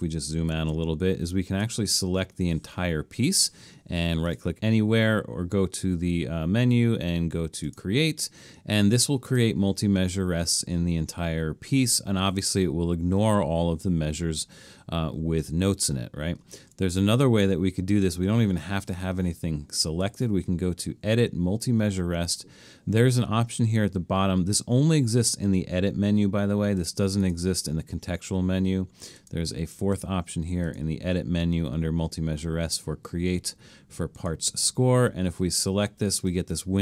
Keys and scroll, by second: 0.2 super+-, 0.5 super+-, 1.9 super+a, 16.6 super+z.